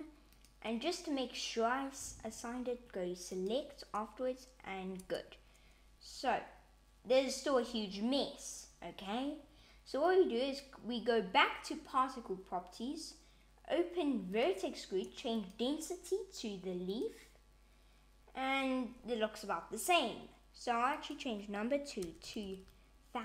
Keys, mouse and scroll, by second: 0.2 click, 3.3 click, 4.9 Tab, 9.9 click, 14.2 click, 15.3 click, 20.9 click, 22.3 0.